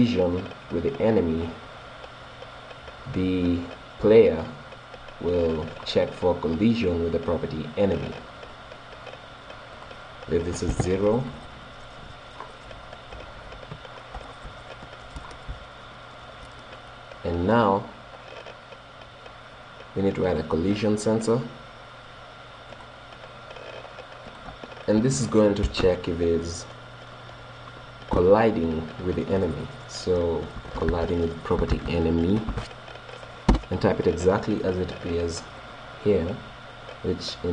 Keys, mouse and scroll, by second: 3.3 right click, 5.4-7.1 middle drag, 8.7 right click, 9.8-11.5 drag, 12.0-16.9 middle drag, 16.9 right click, 17.5 click, 20.3-22.0 drag, 24.3-26.2 drag, 35.7 right click.